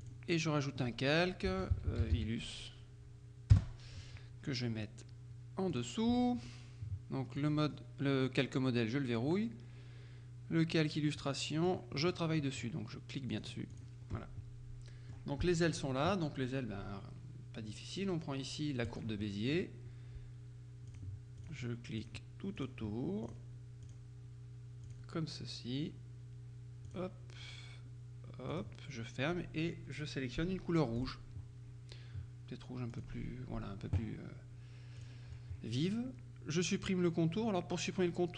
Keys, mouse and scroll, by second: 0.1 click, 1.3-2.7 typing, 3.6 Return, 5.8 click, 7.5 click, 11.2-13.2 drag, 12.1-13.2 right drag, 13.4-14.4 drag, 14.2 middle click, 19.0 click, 19.4 middle click, 21.0-22.0 drag, 22.6 middle click, 23.3-24.5 drag, 24.9 click, 27.0 click, 28.6 click, 31.0 click, 33.0 click, 35.0 click.